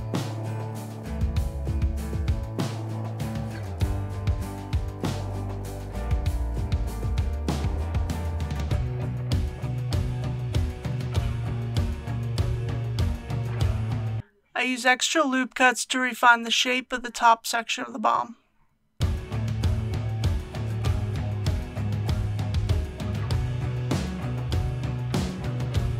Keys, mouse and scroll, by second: 1.4 click, 1.9 KP_1, 3.8 e, 6.8 click, 7.8-8.3 typing, 11.8 click, 17.1 alt+a, 18.2 shift+r, 19.7 ctrl+r, 21.1-21.9 scroll up 1, 21.9 click, 23.4 click, 25.7 shift+click.